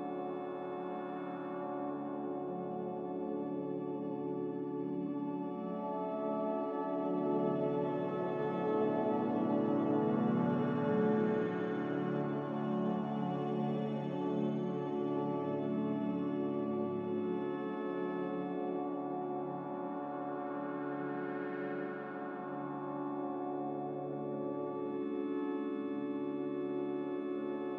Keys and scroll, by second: 0.0-0.4 typing, 4.7-5.4 typing, 8.0 2, 8.7 BackSpace, 8.9 3, 12.0 BackSpace, 13.0 Return, 13.5 a, 14.6 n, 17.0 a.